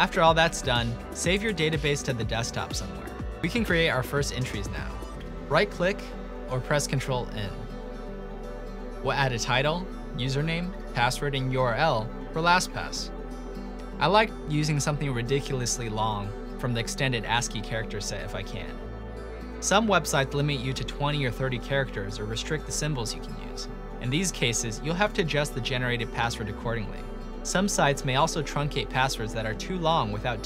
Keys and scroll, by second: 1.5 typing, 7.7 ctrl+n, 9.1-12.6 typing, 15.5-17.4 typing, 21.2-22.0 typing, 24.0-28.5 typing.